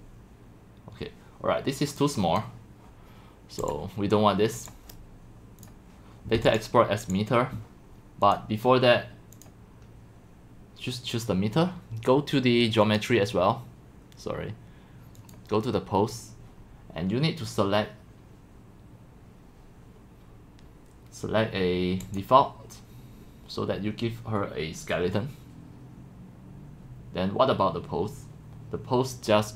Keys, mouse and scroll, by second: 2.4 click, 4.7 click, 5.7 click, 6.6 click, 9.4 click, 12.0 middle click, 12.8 click, 15.6-20.5 drag, 22.2-27.2 drag.